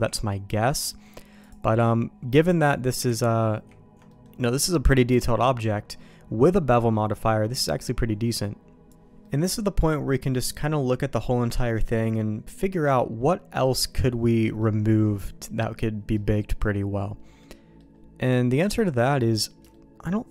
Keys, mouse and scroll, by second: 0.0 ctrl+z, 1.0 ctrl+z, 1.4-2.9 drag, 3.1 ctrl+z, 3.6 ctrl+z, 3.9 ctrl+z, 4.1 middle click, 9.2-12.5 middle drag, 14.6 middle click, 16.1 middle click, 17.4 middle click, 19.7 shift+middle click.